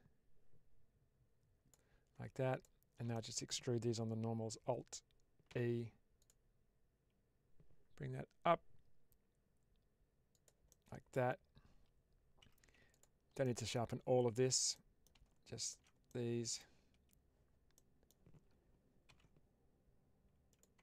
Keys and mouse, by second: 3.0 middle click, 5.4 alt+e, 10.2 click, 10.6 middle click, 12.3 2, 12.8 alt+click, 13.3 middle click, 14.6 middle click, 15.5 alt+shift+click, 15.9 middle click, 17.6 middle click, 19.0 ctrl+b, 20.4 click, 20.7 Tab.